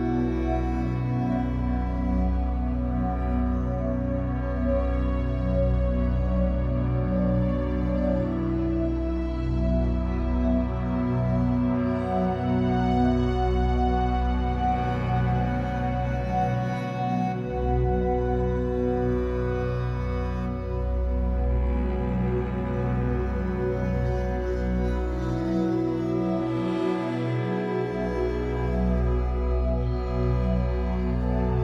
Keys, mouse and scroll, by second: 2.6 click, 3.8 g, 4.6 click, 5.1 g, 5.7 click, 6.4-7.4 shift+drag, 7.4 f, 9.4 click, 9.7 g, 10.6 click, 11.3 g, 11.8 click, 12.2 g, 13.1 click, 13.5 g, 14.0 right click, 14.3 b, 16.4 click, 17.0 middle click, 17.5-19.0 drag, 19.0 x, 20.5-24.6 middle drag, 21.1 KP_1, 22.6 b, 24.6 click, 25.2 alt+a, 25.9 b, 27.6 click.